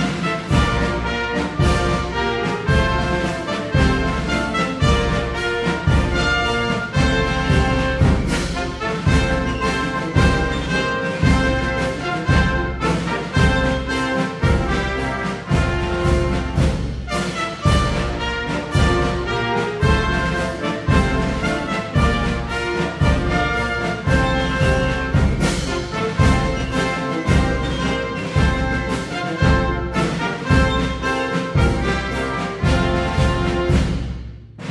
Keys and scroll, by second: 0.0 Down, 5.4 super+d.